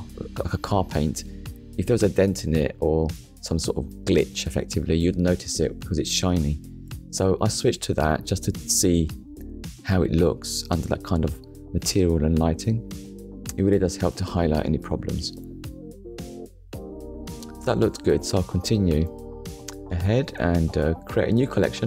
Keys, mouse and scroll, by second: 6.1 click, 7.4 click, 8.2 shift+middle click, 9.5 shift+middle click, 12.6 click, 13.6 middle click, 14.4 KP_1, 15.4 shift+middle click, 16.1 scroll down 1, 16.5 shift+middle click, 19.6 right click, 20.2 click, 21.1 click.